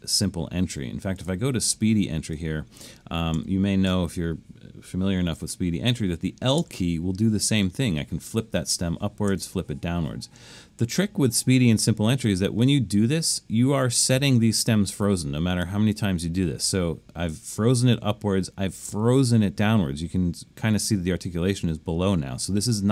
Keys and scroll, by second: 3.3 Left, 3.9 Left, 6.6 l, 9.3 i, 16.7 l, 18.9 i.